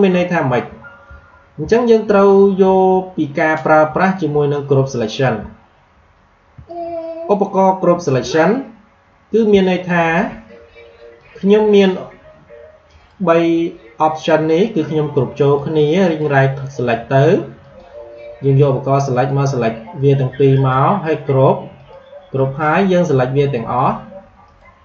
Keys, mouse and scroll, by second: 0.9-1.5 alt+scroll down 1, 1.7 alt+scroll up 1, 4.0 alt+scroll down 1, 5.5-5.8 alt+scroll up 1, 6.5 space, 6.6 click, 6.9 space, 9.5 click, 9.9 space, 11.1 click, 12.8 right click, 14.3 click, 15.9 right click, 17.5-20.5 drag, 20.5 right click, 21.7-24.8 drag, 24.3 right click.